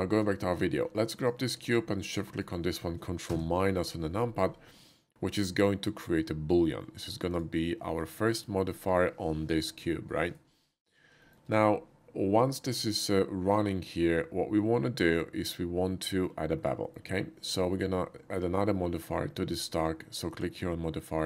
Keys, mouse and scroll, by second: 0.0 shift+middle click, 0.4 shift+middle click, 1.2 shift+click, 1.6 shift+click, 2.2 shift+middle click, 2.4 shift+middle click, 3.2 ctrl+KP_Subtract, 4.7-5.3 middle drag, 6.6 middle click, 7.3 click, 7.8 middle click, 8.3 shift+middle click, 8.7 shift+middle click, 9.6 g, 10.3 right click, 10.6 middle drag, 11.2 shift+middle click, 12.7-16.2 shift+middle drag, 16.8 middle click, 17.4 click, 20.3 click.